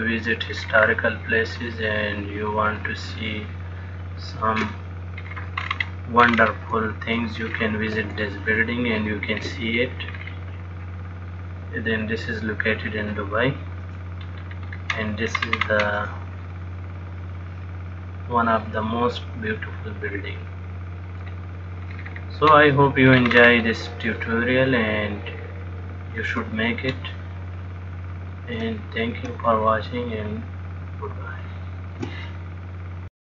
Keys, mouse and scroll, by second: 1.0-1.4 scroll down 7, 1.9 middle click, 3.5 shift+middle click, 5.4-5.9 scroll down 4, 5.8-7.0 scroll up 11, 7.6-8.2 scroll down 4, 8.5 shift+middle click, 10.3-10.9 scroll down 3, 11.6 middle click, 14.5-15.7 scroll down 3, 14.9-15.7 scroll up 1, 15.7-16.4 scroll up 6, 16.8 middle click, 22.2-23.5 scroll down 5, 23.5-24.2 scroll up 6, 24.4 middle click, 27.3 shift+middle click, 29.8 shift+middle click.